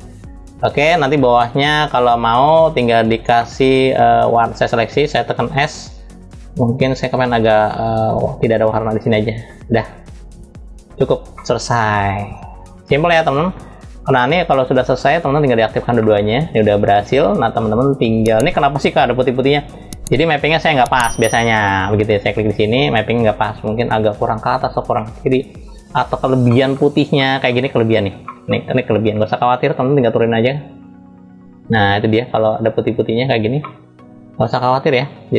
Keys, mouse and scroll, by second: 1.4 click, 3.0 middle click, 4.2-5.2 drag, 5.2 s, 9.6-11.0 drag, 11.0-12.4 middle drag, 14.9 click, 15.8 middle click, 16.3-17.8 middle drag, 18.2 scroll up 2, 21.9 click, 24.6 middle click, 25.3-25.7 scroll up 3, 26.1 middle click, 26.8 middle click, 27.4-27.9 scroll down 2, 27.9-28.6 middle drag, 28.6-31.7 drag, 33.2-34.6 middle drag, 34.7 scroll down 2.